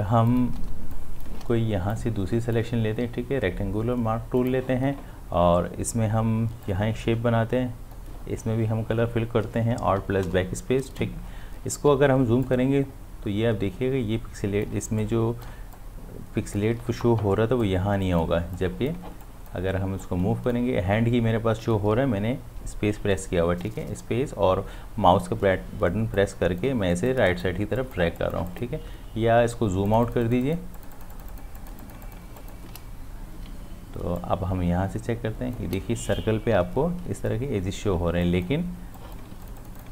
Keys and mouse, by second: 0.7 space, 0.9 click, 1.2 space, 1.9-4.4 drag, 6.6-10.4 drag, 11.9 space, 12.4-15.8 ctrl+drag, 15.8-17.2 ctrl+drag, 17.2 space, 17.7 click, 17.7 space, 19.2 click, 20.0 click, 20.4 space, 20.7 space, 27.1 click, 27.8 click, 28.9 space, 29.9 click, 29.9 ctrl+alt+click, 33.4 space, 34.2-36.5 ctrl+drag, 36.5 space, 38.2 click.